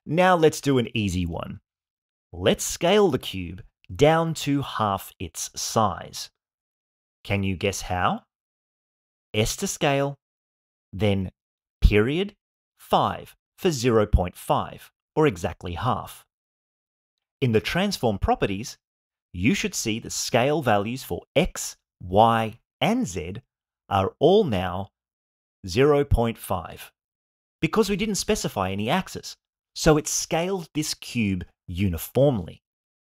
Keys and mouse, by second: 9.9 s, 11.5 ., 13.0 5, 15.3 Return.